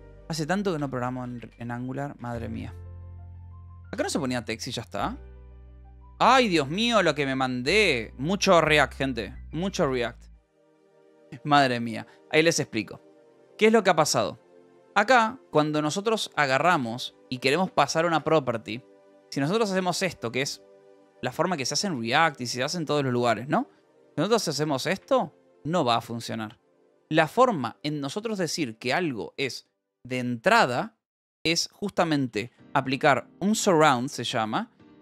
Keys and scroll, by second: 0.0-10.6 typing, 0.7 Escape, 4.5 ctrl+s, 10.9 ctrl+s, 14.6-19.8 typing, 17.7 Right, 20.2 ctrl+s, 24.5 ctrl+=, 26.9 h, 31.3-34.8 typing.